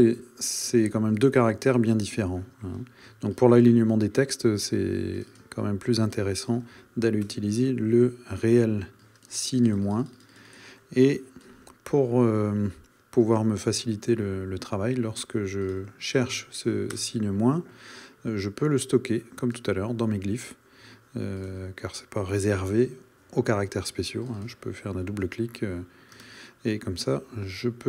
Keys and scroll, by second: 1.7 shift+super+à, 7.3 BackSpace, 17.0 Return, 26.2 space.